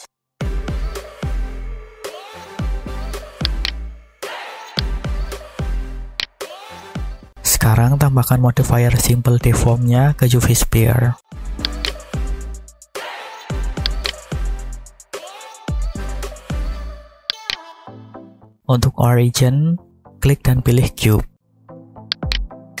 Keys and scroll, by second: 0.2 s.